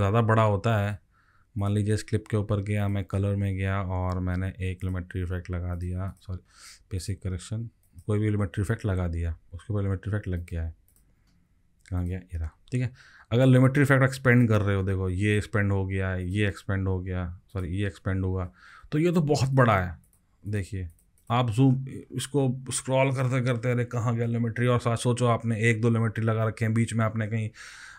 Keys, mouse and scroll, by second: 6.1 double click, 6.4 double click, 13.2 scroll down 3, 14.8-16.4 scroll down 9, 18.1-19.4 scroll down 15, 20.4 double click, 20.9 double click, 21.2 double click, 21.7-23.5 scroll up 36, 23.5-27.5 scroll down 44, 27.5-27.9 scroll down 9.